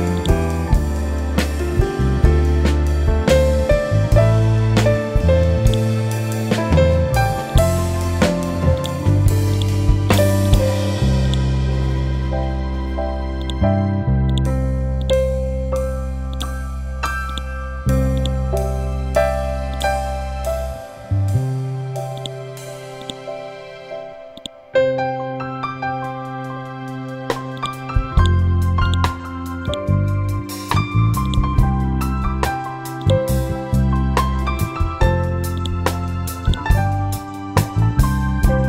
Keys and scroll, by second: 2.7 Up, 4.0 Down, 28.6 c, 36.0 c.